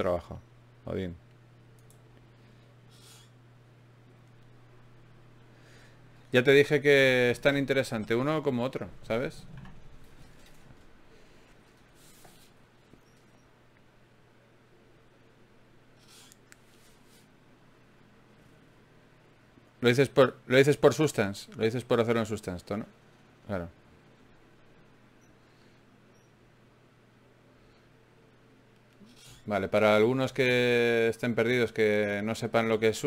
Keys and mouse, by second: 2.9-5.5 drag, 5.5 g, 7.7-14.6 drag, 13.6 e, 16.8-19.0 middle drag, 19.0 right click, 19.4-22.6 drag, 23.2 click, 23.6 right click, 24.6 click, 25.6 d, 25.8-28.1 drag, 29.0 shift+q, 32.3 click.